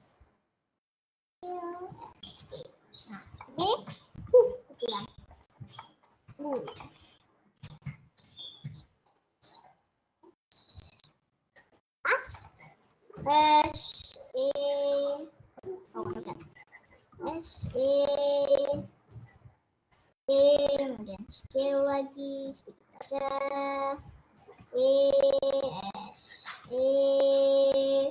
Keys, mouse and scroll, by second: 1.1 s, 1.8 e, 2.5 s, 3.8 middle click, 4.5 s, 5.7-6.7 middle drag, 7.1-7.5 scroll down 2, 7.7 KP_Add, 8.1 KP_Add, 8.5 KP_Add, 9.9 s, 11.4-11.7 scroll up 4, 11.7 click, 12.3 middle click, 13.2 s, 14.3 e, 16.1 ctrl+z, 17.3 s, 17.7 e, 20.5 e, 21.5 s, 24.6 scroll down 1, 25.1 e, 25.7 s, 26.5 e.